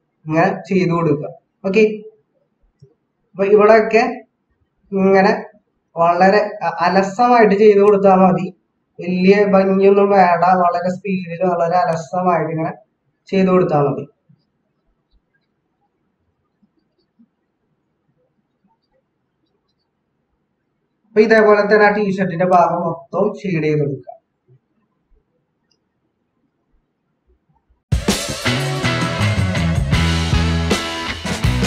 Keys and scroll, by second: 31.1 ctrl+-.